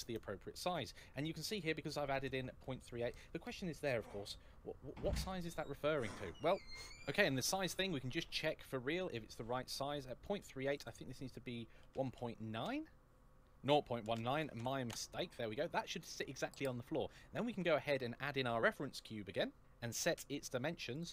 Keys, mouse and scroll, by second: 1.0-1.6 scroll up 1, 6.9 shift+middle click, 10.6 click, 11.6 KP_1, 11.7 KP_1, 12.0 KP_9, 12.4 Return, 13.2 click, 13.8 KP_0, 13.9 KP_0, 14.2 KP_1, 14.4 KP_9, 14.7 Return, 17.3 shift+a, 20.8 click.